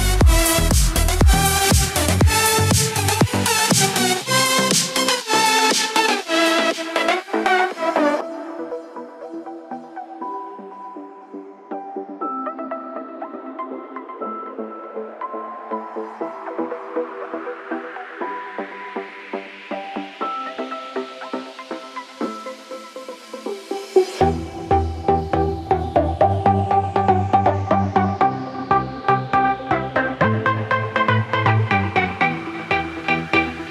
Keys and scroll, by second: 20.1 ctrl+alt+shift+e.